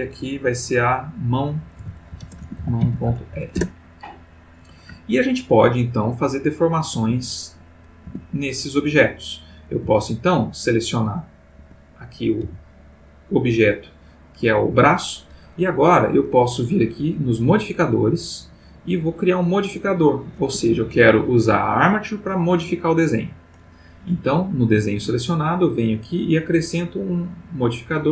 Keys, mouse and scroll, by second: 0.9 click, 1.7 F2, 2.2-3.1 typing, 3.5 shift+Return, 5.0-7.1 ctrl+middle drag, 8.0 Tab, 8.6 click, 9.7 g, 11.6 Escape, 12.4 g, 14.7 Escape, 17.1 click, 19.9 click, 20.6 Escape, 21.7 click, 22.7 click, 25.8 click.